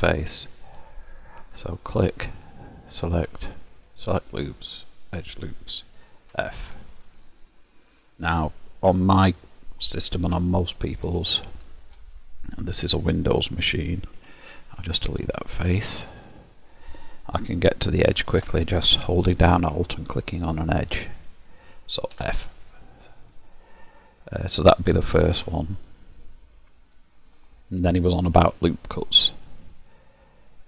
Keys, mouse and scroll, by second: 1.6 click, 2.8 click, 6.4 f, 7.5 middle click, 10.6 shift+middle click, 11.4 middle click, 14.2 3, 14.9 click, 15.2 Delete, 18.4 2, 20.1 alt+click, 22.2 f, 23.3 middle click.